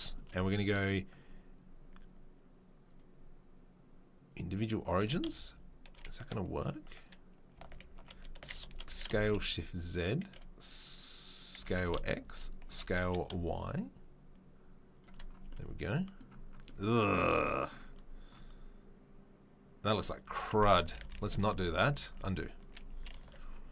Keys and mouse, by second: 2.8-5.2 drag, 5.0 e, 5.2 shift+right click, 5.9-8.6 drag, 8.6 shift+right click, 8.7 click, 8.9 s, 9.0-10.2 shift+right drag, 10.2-15.4 middle drag, 15.4 Tab, 18.3 Tab, 19.9 Tab, 20.9 ctrl+z, 21.1 ctrl+z, 21.6 ctrl+z, 21.8 ctrl+z, 21.9-22.6 ctrl+z, 22.5-23.7 ctrl+middle drag, 23.1 ctrl+z.